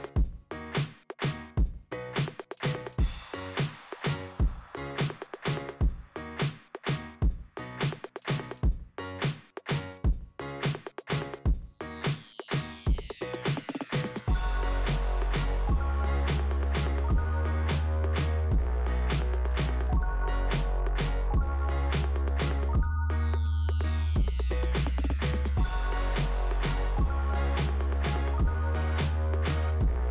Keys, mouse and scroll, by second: 1.6 click, 2.8 click, 5.7 click, 6.2 click, 7.8 click, 9.8 click, 11.1 click, 12.5 click, 12.7 click, 12.8 double click, 14.0 scroll up 2, 19.3 click, 19.5 double click, 21.2 click, 21.5 click, 21.7 double click, 23.3-24.4 scroll down 1, 25.3 click, 26.5 click, 27.6 click, 28.5 click, 28.7 click.